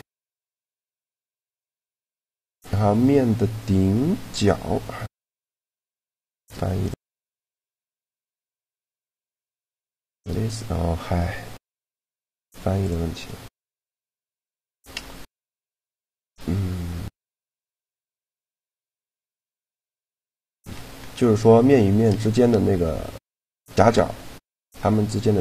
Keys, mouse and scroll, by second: 2.0-3.6 drag, 7.9 middle click, 10.3 shift+g, 13.4-15.2 drag, 15.2-17.2 right drag, 16.6 shift+g, 18.7-22.4 drag, 24.0-25.4 drag.